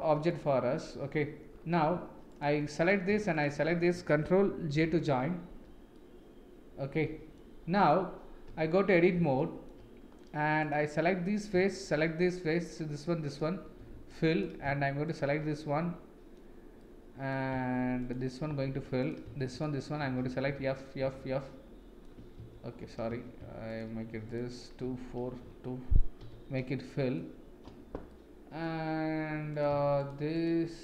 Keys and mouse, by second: 1.9 Tab, 2.3 click, 2.8 click, 4.9 ctrl+j, 5.9-7.3 middle drag, 8.4 Tab, 9.3 shift+middle click, 10.6 click, 11.0 middle click, 13.2 shift+click, 13.7 f, 15.0 shift+click, 15.5 middle click, 16.8 middle click, 18.0 shift+click, 18.5 f, 19.0 click, 19.5 shift+click, 20.0 f, 20.4 f, 21.0 f, 21.4 middle click, 22.3 ctrl+z, 23.7 shift+click, 24.8 d, 26.2 f, 26.7 middle click, 28.1 middle click, 30.3 shift+click.